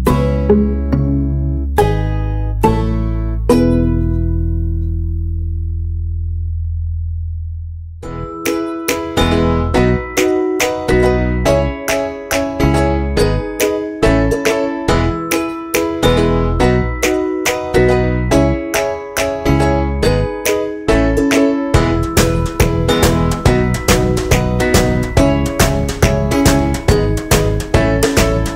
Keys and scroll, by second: 21.0 ctrl+z, 21.4 ctrl+u, 24.2 ctrl+s.